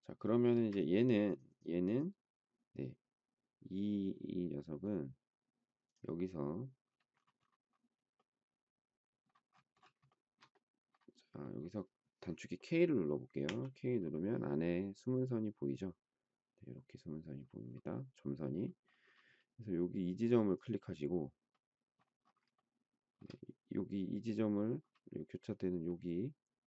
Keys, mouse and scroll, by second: 0.5 space, 10.1 shift+middle click, 13.5 k, 22.5 shift+middle click.